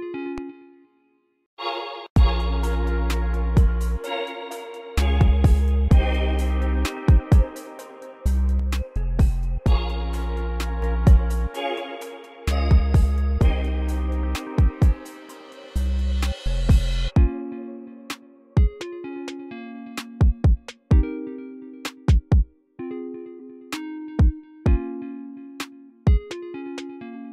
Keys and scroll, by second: 0.0 space, 1.4 space, 2.0 space, 5.2 v, 19.9 v, 21.1 v, 22.0 x.